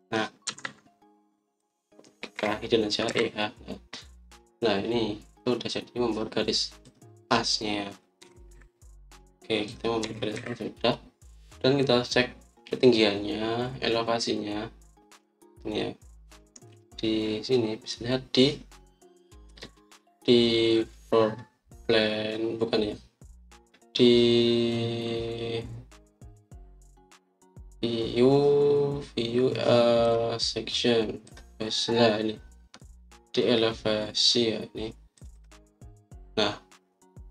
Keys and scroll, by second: 1.4 Escape, 1.5 Escape, 3.3-4.0 typing, 9.1 typing, 10.9-11.2 typing.